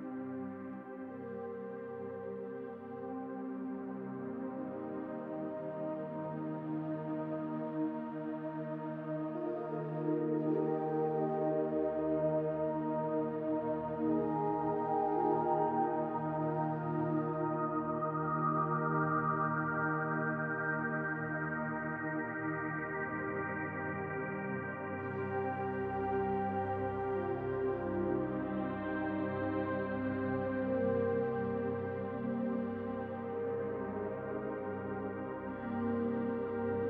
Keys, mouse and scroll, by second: 0.6 middle click, 1.4 click, 1.7 l, 2.3 click, 3.3 middle click, 4.1 click, 4.5 middle click, 5.2 click, 5.5 l, 6.0 click, 7.5 scroll down 1, 8.2 click, 9.4-9.7 scroll down 2, 9.7 middle click, 13.5-14.2 scroll down 2, 13.9 middle click, 16.0-16.4 scroll up 3, 16.4 middle click, 17.1-17.6 scroll up 2, 17.6 shift+middle click, 18.5 middle click, 19.4 middle click, 19.7 shift+middle click, 22.0 Tab, 22.0 middle click, 22.5-23.4 scroll down 2, 22.8 middle click, 25.4-25.9 scroll down 2, 25.9 middle click, 27.5-27.9 scroll down 1, 28.1 shift+middle click, 28.7 scroll down 4, 29.3 shift+middle click, 32.7 click, 33.5-33.9 scroll up 4, 33.9 middle click, 35.6 s.